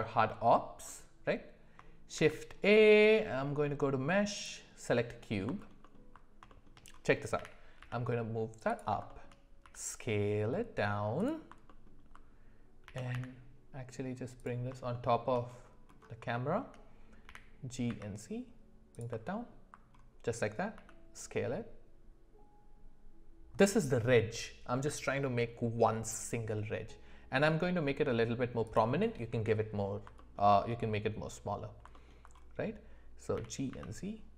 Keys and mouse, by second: 0.9 middle click, 2.1 shift+a, 5.6 alt+middle drag, 5.8 alt+middle click, 6.5 shift+middle click, 7.4 g, 9.1 shift+middle click, 9.6 s, 11.7 middle click, 12.9 g, 14.9 middle click, 16.3 shift+middle click, 17.3 g, 19.3 alt+middle click, 20.7 s, 31.9 alt+middle click, 33.4 g.